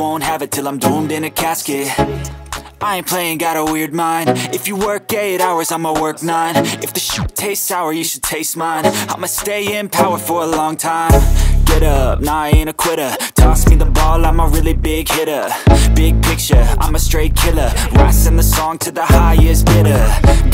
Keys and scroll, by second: 1.0 F2.